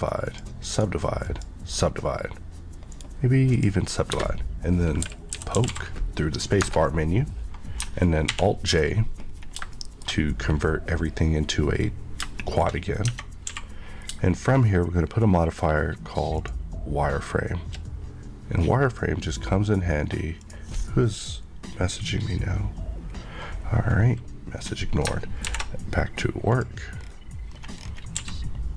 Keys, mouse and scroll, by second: 0.3 click, 0.7 right click, 1.2 click, 1.8 scroll up 1, 2.9 right click, 3.5 click, 4.1-5.6 typing, 6.6 Return, 8.3 alt+j, 9.2 scroll up 1, 9.7 shift+middle click, 12.3 shift+middle click, 12.6 scroll up 1, 13.0 Tab, 13.5 q, 16.3 shift+click, 17.8 click, 20.4 click, 24.6-25.0 scroll up 1, 25.4 alt+m, 26.4 click, 27.0 scroll down 1, 27.5 scroll up 1, 28.2 q.